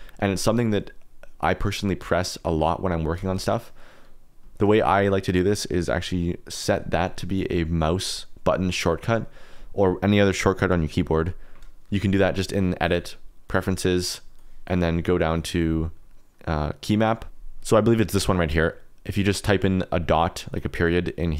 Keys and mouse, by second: 1.2 click, 3.3 click, 3.5 KP_Decimal, 4.5 shift+middle click, 12.8 click.